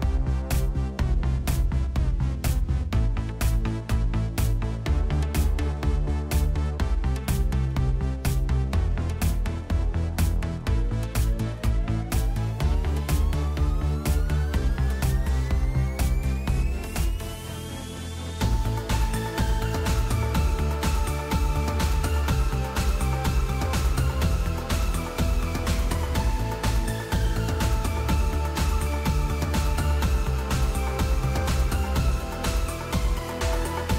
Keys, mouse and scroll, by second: 1.9 Return, 7.8 typing, 8.4 Return, 20.2 Up, 20.4 Up, 21.5 Return.